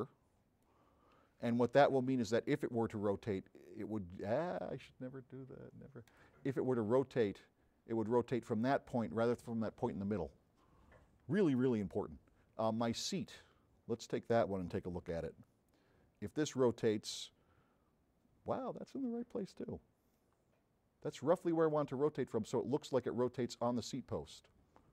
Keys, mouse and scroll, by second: 2.7-4.8 drag, 7.3-8.8 drag, 13.2 click, 14.1 middle click, 16.5 click, 20.2-23.6 drag.